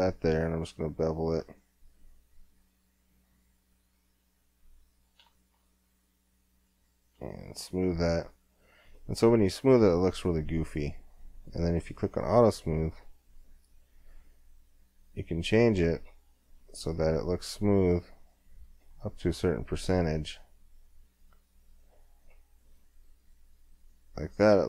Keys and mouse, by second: 4.1-5.5 middle drag, 5.5 Tab, 6.8-8.2 drag, 8.2 middle click, 8.3-10.2 drag, 11.4-14.7 drag.